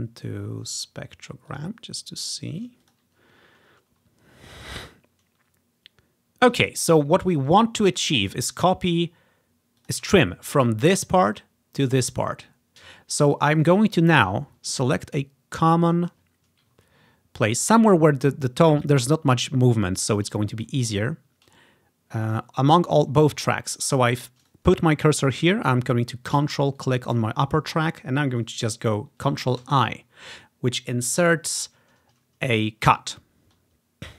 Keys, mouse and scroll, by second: 0.9 click, 1.6 click, 2.9 click, 3.6 scroll up 2, 4.8 scroll up 2, 5.4 scroll down 2, 6.2 scroll down 1, 7.6 click, 8.2-9.5 drag, 9.9-11.6 drag, 15.6 click, 16.9 scroll up 1, 17.7-18.7 scroll up 1, 18.7 scroll up 1, 20.9 ctrl+click, 23.9 click, 24.5 click, 26.8-28.5 ctrl+drag, 29.7 ctrl+i.